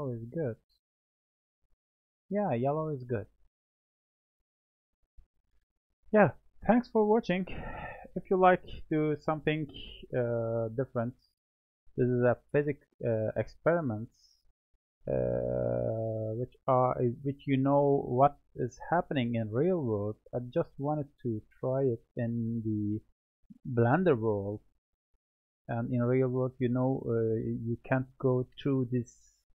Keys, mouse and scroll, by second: 2.0 click, 2.5-2.9 scroll down 2, 2.9-5.2 middle drag, 5.2-5.9 scroll down 2, 5.9-9.0 middle drag, 11.1-13.4 scroll up 3, 13.4 click, 14.2-15.4 drag, 15.4-18.4 middle drag.